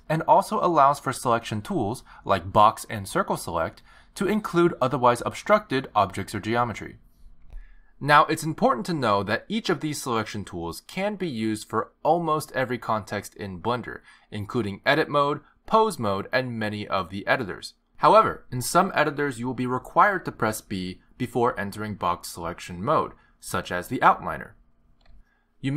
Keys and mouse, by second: 0.5 click, 1.4 click, 2.8 click, 5.6 c, 10.4 click, 11.7 b, 24.9 b.